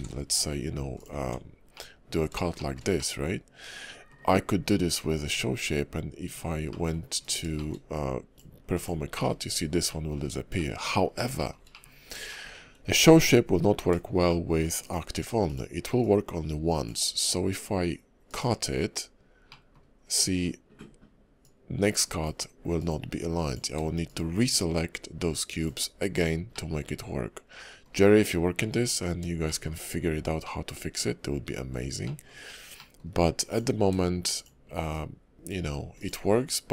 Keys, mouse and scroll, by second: 0.0 alt+s, 1.2 Tab, 1.7 middle click, 2.5 shift+middle click, 2.9 middle click, 4.9-5.3 scroll down 2, 5.2 Tab, 6.2 Tab, 6.7 middle click, 7.2 click, 7.5 shift+middle click, 7.9 click, 9.1 middle click, 9.4-9.9 scroll up 3, 9.8 middle click, 10.2 scroll down 2, 10.5 middle click, 11.0 scroll down 1, 11.4 shift+middle click, 11.8 middle click, 11.9-12.2 scroll up 2, 12.2 shift+middle click, 14.3 shift+middle click, 14.8 click, 15.4 shift+click, 16.0 click, 19.5 middle click, 21.4 click, 23.4 click, 24.0 shift+click, 24.7 click, 26.5 middle click, 28.6 middle click, 29.4 shift+middle click, 30.4 middle click, 32.0 shift+middle click, 32.4 scroll up 1, 32.7 middle click, 33.5 click, 34.3 shift+click, 34.9 click.